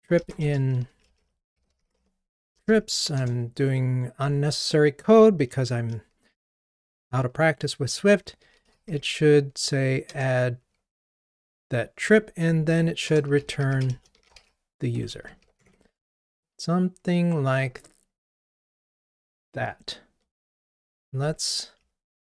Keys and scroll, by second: 10.1 Return, 12.0 Escape, 14.4 Escape, 14.9 Escape, 15.6 super+BackSpace, 19.5 super+BackSpace, 19.6 ctrl+r, 21.3 super+k.